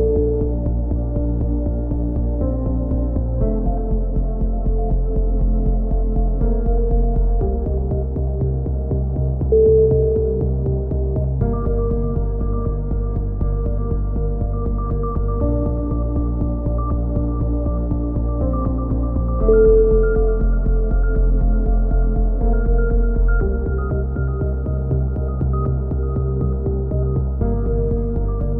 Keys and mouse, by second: 0.4 click, 2.9-4.4 right drag, 4.5 middle click, 5.4 right click, 6.4 middle click, 7.0 click, 9.3-10.8 right drag, 10.9-12.1 right drag, 12.1 click, 15.3 a, 16.6 middle click, 16.9-18.0 drag, 18.0 middle click, 20.4 click, 23.9-26.4 right drag, 24.9 middle click, 26.1 click, 27.3 right click, 27.7 click.